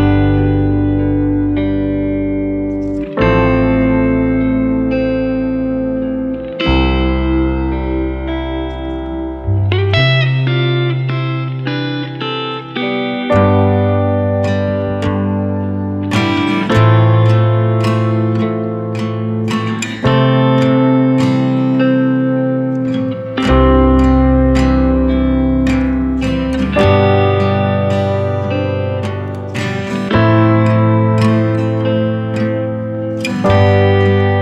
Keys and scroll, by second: 1.2 ctrl+c, 1.4 ctrl+v, 24.9 ctrl+z, 26.9 ctrl+z.